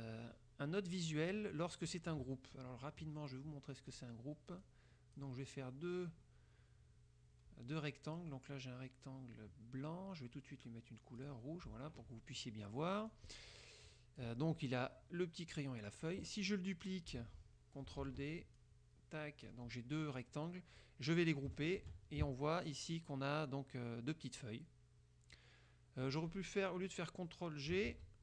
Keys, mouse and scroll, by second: 0.0 click, 4.0 click, 4.8 click, 11.3 click, 13.2 click, 14.0 click, 18.1 ctrl+d, 18.7-19.8 ctrl+drag, 20.3-21.1 drag, 21.9 ctrl+g, 28.0 ctrl+z.